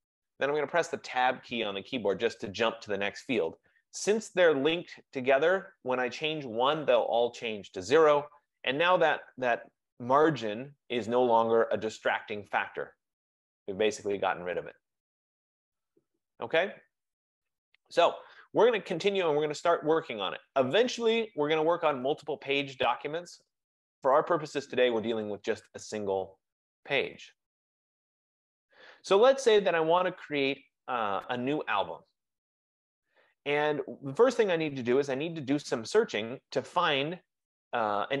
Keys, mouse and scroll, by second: 0.8 Tab, 22.0 click, 24.3 click, 28.5 F15.